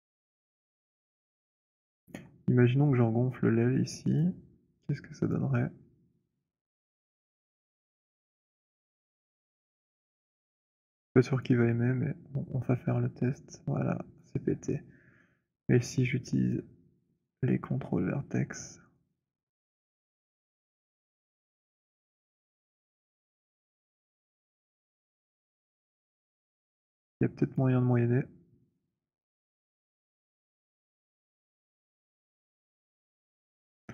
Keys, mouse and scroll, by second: 1.8 alt+click, 4.1 click, 5.1 click, 7.6 right click, 10.1 alt+click, 11.5 click, 13.9 click, 13.9 z, 16.5 right click, 18.3 middle click, 19.8 alt+click, 20.6 click, 25.0 click, 27.5 alt+click, 28.8 click, 30.1 click, 31.6 alt+click, 33.6 click.